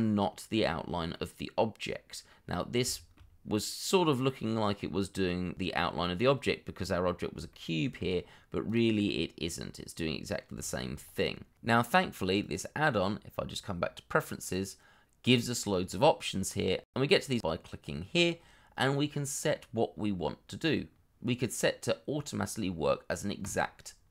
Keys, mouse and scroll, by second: 2.6 scroll down 1, 2.9 shift+middle click, 3.4-5.5 scroll up 1, 7.5 shift+middle click, 9.1 middle click, 10.6 shift+middle click, 11.0 scroll up 1, 18.7 scroll down 1.